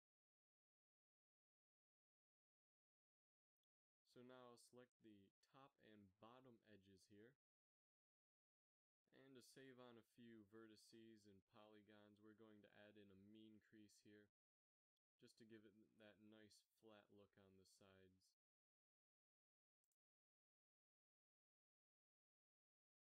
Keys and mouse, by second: 2.2 ctrl+r, 4.5 ctrl+z, 6.9 ctrl+Tab, 8.3-10.3 drag, 10.5 z, 15.5 z, 22.5-23.0 typing.